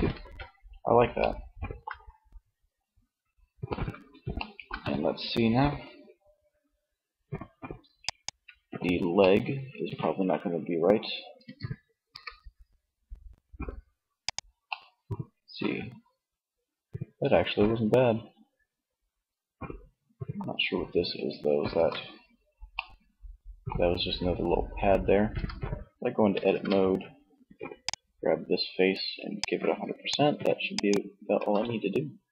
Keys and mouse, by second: 10.6 r, 13.3 click, 13.7-15.5 middle drag, 17.0 middle click, 19.3 middle click, 20.8 ctrl+z, 24.4 Tab, 25.5 ctrl+Tab, 30.3 Tab, 31.6 Tab.